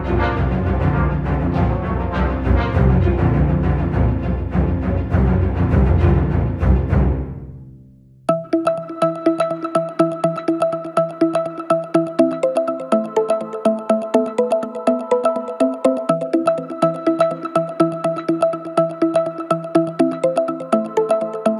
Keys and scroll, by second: 0.1 4, 7.3 ctrl+z, 14.8 3, 18.0 4, 21.0 F1.